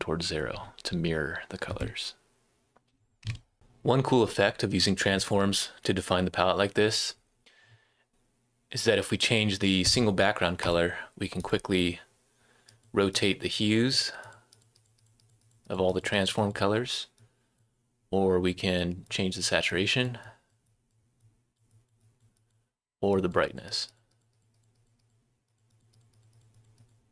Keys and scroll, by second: 3.3 super+⟲, 3.5 Right, 3.5 s.